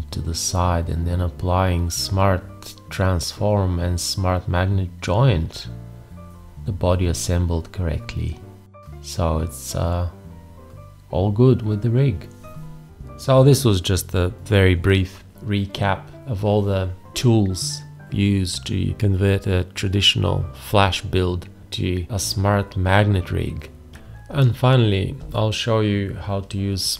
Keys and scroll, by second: 2.8 1, 4.9 `, 8.4 ctrl+z, 10.1 ctrl+z, 11.1 ctrl+z, 23.9 F10.